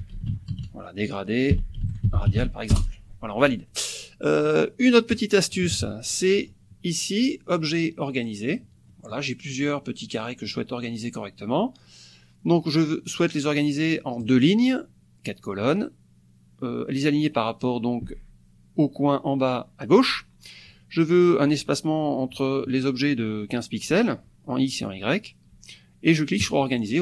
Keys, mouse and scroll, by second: 0.0-2.9 typing, 4.4 click, 5.1 click, 5.6 KP_Subtract, 6.3 click, 6.4 middle click, 7.2 click, 8.6 click, 8.9 middle click, 9.7 click, 10.5-11.6 drag, 14.2 click, 26.4 click.